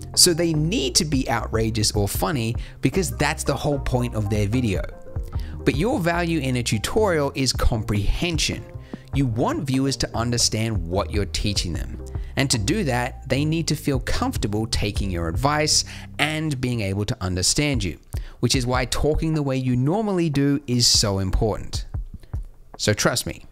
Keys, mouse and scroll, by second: 5.6 middle click, 6.0 g.